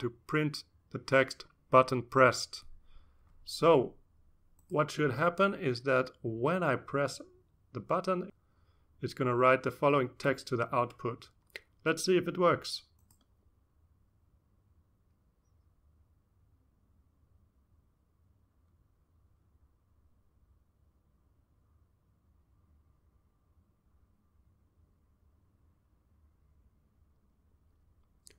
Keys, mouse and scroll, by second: 0.0-3.1 typing, 4.1 shift+space, 4.5 shift+0, 5.5 ctrl+s, 7.6 click, 9.6-10.6 drag, 11.5 click, 12.5 click, 13.9-15.2 drag, 15.9 click, 17.1-20.7 drag, 21.5-22.0 scroll down 1, 24.8-27.1 drag, 27.5-28.1 scroll up 1.